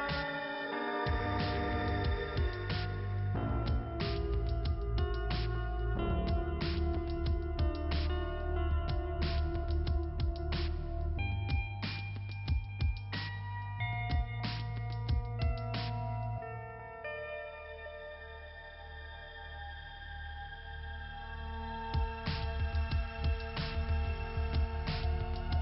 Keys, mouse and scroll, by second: 3.9 scroll up 1, 6.7 click, 8.9 click, 12.3 click, 14.2 click, 15.0 click, 16.9 click, 18.1 click, 18.3 click, 19.0 scroll up 2, 23.6 click.